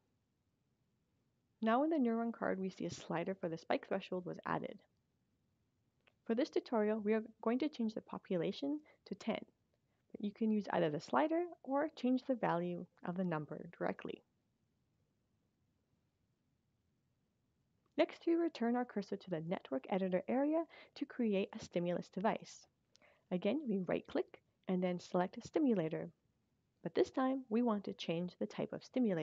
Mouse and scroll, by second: 7.8 click, 10.0 click, 20.7 right click, 22.3 click.